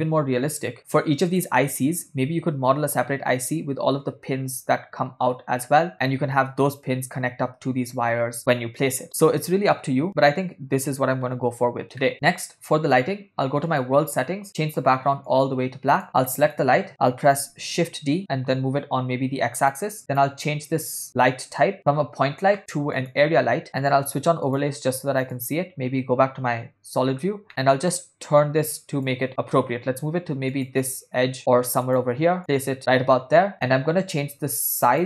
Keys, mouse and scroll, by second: 0.5 ctrl+middle click, 0.8 shift+middle click, 1.6 click, 13.7 click, 14.5 click, 16.5 click, 17.8 shift+d, 20.8 click, 23.2 click, 24.5 drag, 25.4 click, 26.7 KP_7, 27.5 ctrl+middle click, 28.2 click, 30.4 g, 31.4 g, 32.4 click, 33.5 middle click, 34.7-35.0 shift+drag.